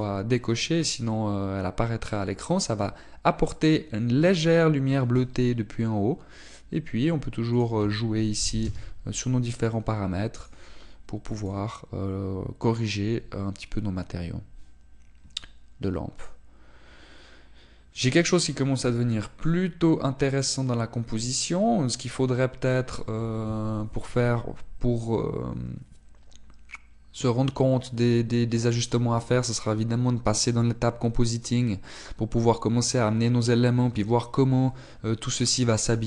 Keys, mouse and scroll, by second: 0.3 click, 9.8 click, 11.6 click, 14.3 scroll up 1, 31.6 scroll up 1, 32.3 scroll down 1.